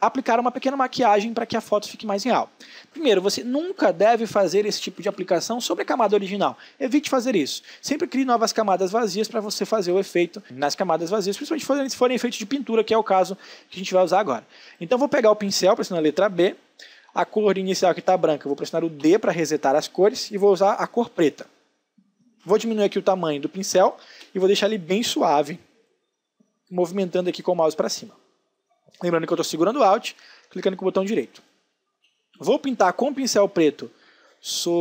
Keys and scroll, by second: 13.3 space, 15.7 b, 19.0 d, 23.3 space, 30.8 space.